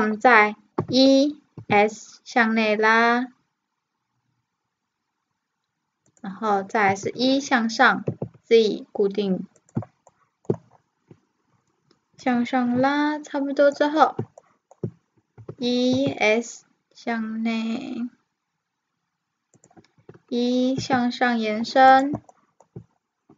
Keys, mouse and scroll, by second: 0.8 e, 6.9 e, 10.1-12.2 middle drag, 12.2-14.0 drag, 14.0-16.3 middle drag, 15.4 e, 20.0 e, 22.3-23.3 middle drag.